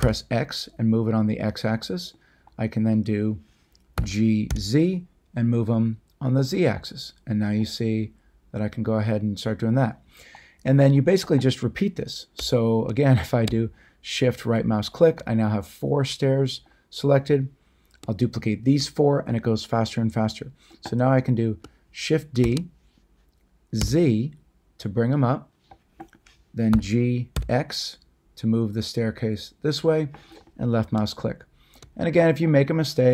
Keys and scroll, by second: 0.0 x, 3.9 g, 4.5 z, 22.4 d, 23.8 z, 26.7 g, 27.3 x.